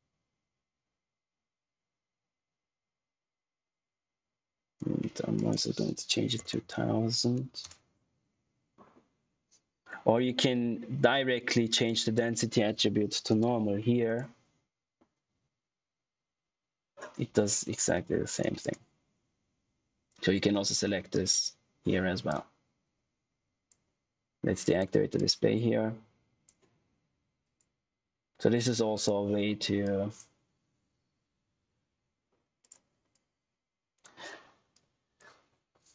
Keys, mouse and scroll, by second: 7.5 Return, 11.8 click, 13.2 shift+n, 14.0 click, 15.2-16.0 scroll up 1, 18.2 click, 21.0 click, 31.5 z, 32.5 click.